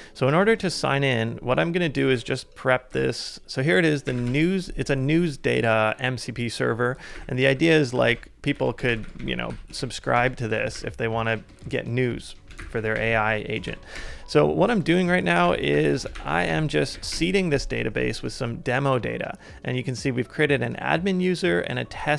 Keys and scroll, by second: 0.6 super+Tab, 2.2 ctrl+a, 2.9-4.5 typing, 7.1 ctrl+a, 7.1 ctrl+j, 7.5 typing, 8.0 ctrl+a, 8.5 ctrl+a, 9.1 ctrl+a, 9.8 super+v, 10.7 ctrl+a, 11.3-13.0 typing, 12.8 ctrl+a, 13.7 super+v, 15.3 ctrl+a, 15.9 ctrl+v, 16.4 ctrl+a, 16.9 super+v, 17.1 Return, 17.7 typing.